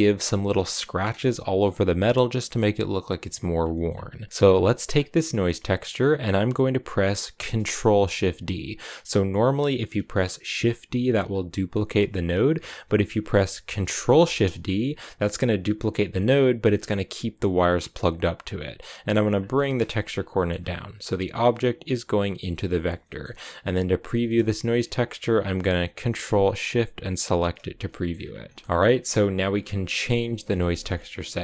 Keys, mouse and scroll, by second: 3.5 middle click, 3.7-4.7 scroll up 4, 4.7 click, 5.8-8.9 middle drag, 11.7-14.0 drag, 14.0 ctrl+shift+d, 18.0 click, 19.4 middle click, 19.7 click, 20.1-25.9 middle drag, 27.0 ctrl+shift+click, 27.7 middle click, 27.9-29.2 scroll up 4, 29.2-30.3 scroll up 1, 30.3-31.4 middle drag.